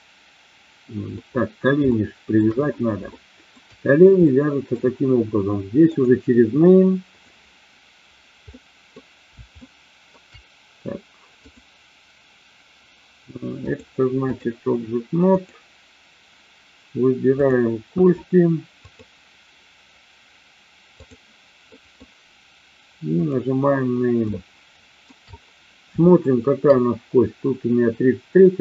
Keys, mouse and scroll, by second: 1.1 middle click, 1.7 shift+middle click, 3.1 shift+middle click, 4.1-4.7 middle drag, 5.9 click, 7.1 click, 8.5-8.9 middle drag, 9.6-10.1 shift+middle drag, 11.5-12.2 drag, 13.6-14.4 drag, 18.7-21.1 drag, 21.6-22.0 middle drag, 24.2-25.0 shift+middle drag, 26.0 shift+middle click.